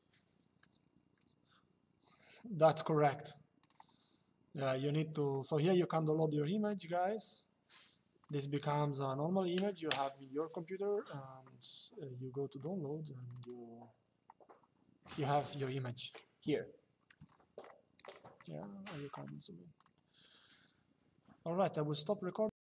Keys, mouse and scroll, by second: 3.3 click, 6.3 click, 7.9 click, 10.6 click, 12.2 click, 19.5 click, 22.7 click.